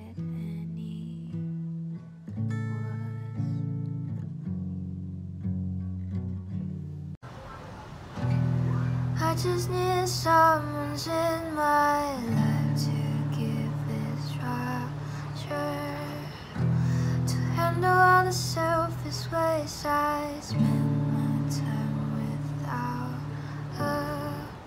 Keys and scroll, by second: 16.8 space.